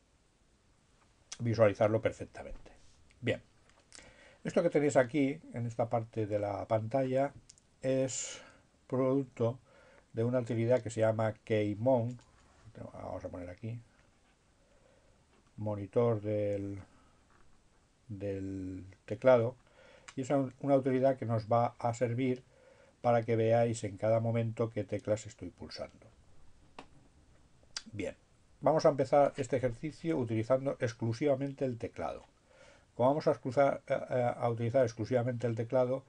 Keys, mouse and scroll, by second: 14.2-16.1 drag, 17.2 click, 19.4 click.